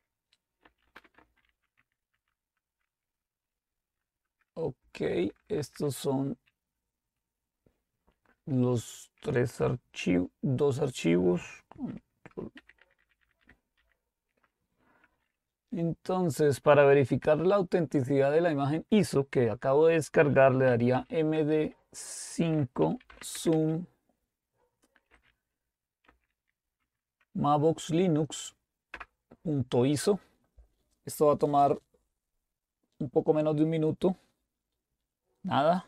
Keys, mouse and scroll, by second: 0.4-2.0 typing, 2.1 Tab, 4.9-5.7 typing, 12.6 ctrl++, 12.8 ctrl++, 13.0 ctrl++, 13.2 ctrl++, 13.4-13.8 ctrl++, 20.5-23.8 typing, 24.9-26.8 typing, 28.6 typing, 29.0 Return, 30.6 Return.